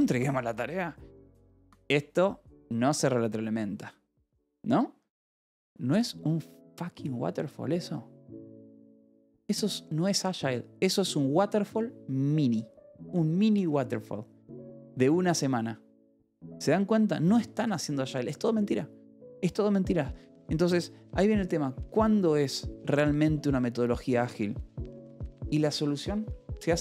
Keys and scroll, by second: 25.3-26.8 typing.